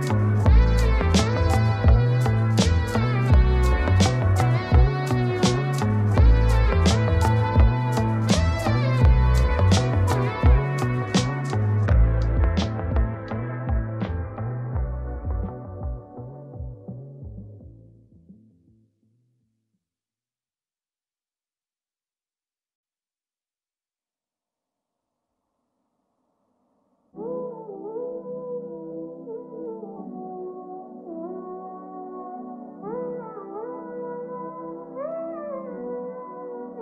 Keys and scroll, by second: 34.3 ctrl+space.